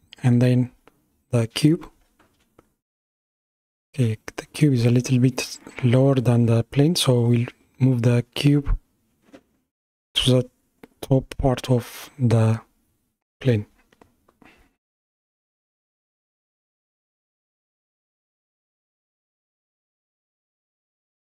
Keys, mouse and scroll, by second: 2.7-3.0 scroll up 3, 3.3-6.1 middle drag, 6.1 KP_1, 8.1 scroll down 3, 8.9-11.7 middle drag, 11.7-12.2 scroll up 3, 12.2 scroll down 2, 15.6 g.